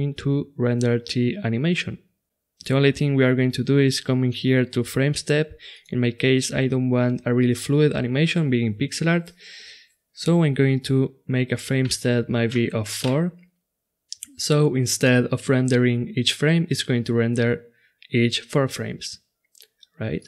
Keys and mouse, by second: 0.0 click, 5.7-7.7 drag, 20.2 click.